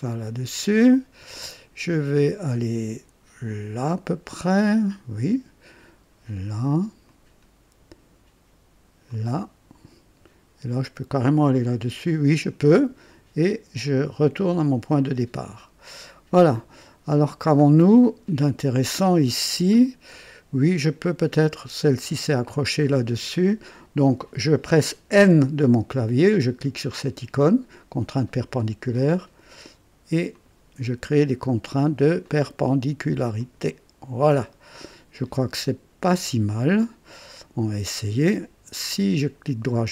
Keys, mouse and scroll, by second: 4.7 click, 7.0 click, 9.0 click, 12.0 click, 14.5 click, 15.9 right click, 16.6-16.9 scroll up 2, 17.3 scroll down 2, 17.8 right click, 19.8 scroll up 2, 22.6 scroll down 2, 23.7 right click, 25.1 n, 25.3 n, 28.9 click, 30.3 click, 32.2 click, 33.4 click, 38.7 right click.